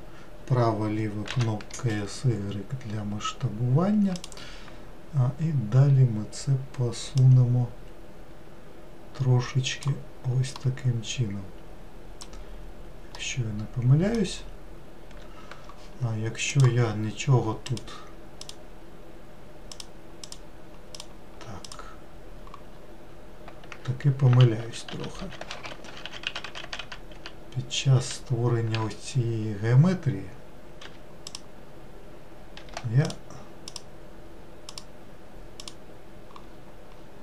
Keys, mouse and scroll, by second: 1.3 s, 7.1 click, 10.6-16.2 middle drag, 16.5-17.7 drag, 18.4 click, 19.7 click, 20.2 click, 20.9 click, 21.6 click, 22.7-23.8 scroll up 2, 24.3 ctrl+z, 24.6 ctrl+z, 24.9 ctrl+z, 25.2 ctrl+z, 25.9 ctrl+z, 26.0 ctrl+z, 26.2-27.9 ctrl+z, 30.8 4, 31.3-32.6 drag, 32.6 3, 33.0 click, 33.7-34.8 drag, 35.6 click, 36.5-37.2 scroll up 2.